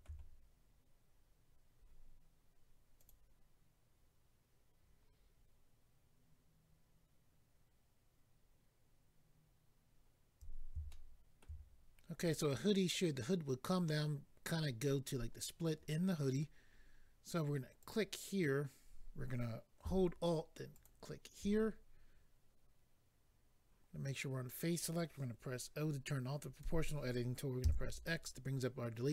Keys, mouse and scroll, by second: 3.0 click, 3.1 click, 9.9-10.6 scroll up 2, 10.9 shift+middle click, 17.8 click, 17.9 click, 20.7 alt+click, 20.8 alt+click, 27.6 o, 27.6 x.